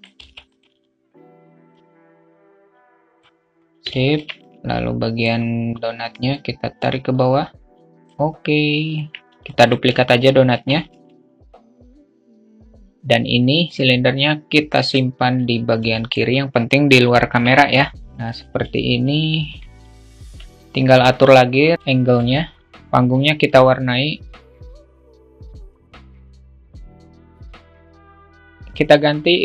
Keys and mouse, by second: 1.1-2.7 drag, 3.4 alt+shift+middle click, 3.8-4.8 drag, 5.7-8.0 drag, 8.0 alt+middle click, 8.9 alt+middle click, 10.4 shift+d, 14.5 click, 15.4-16.0 alt+middle drag, 16.8 KP_0, 17.9 q, 19.7-21.3 alt+shift+middle drag, 22.3 alt+shift+middle click, 22.7 q, 23.0 click, 24.6 click, 25.0 click, 25.3 click, 26.0 click, 26.9 q, 27.0 alt+middle click, 27.2 alt+middle click, 27.4 q, 27.7 ctrl+click, 27.9 ctrl+z, 28.0 ctrl+click, 28.6 click.